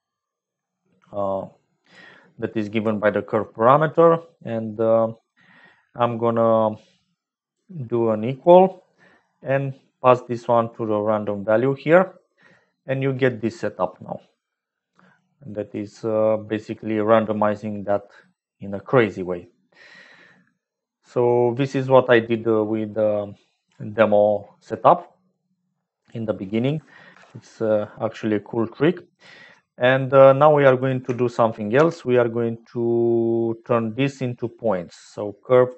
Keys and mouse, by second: 2.4 click, 7.5 click, 9.3 click, 12.5 middle click, 13.6 middle click, 15.2 click, 16.7-21.6 middle drag, 23.5 click, 25.3 click, 27.0 ctrl+j, 28.5 click, 30.7 click, 31.7 shift+a.